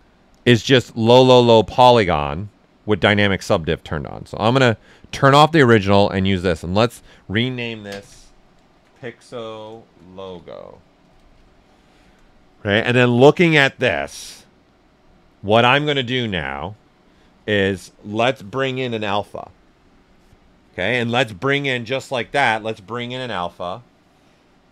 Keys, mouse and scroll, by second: 1.1 shift+d, 1.6-2.9 right drag, 2.9 d, 3.4-5.0 right drag, 5.0 click, 8.4-10.8 typing, 14.0 Return, 14.3-23.0 alt+right drag.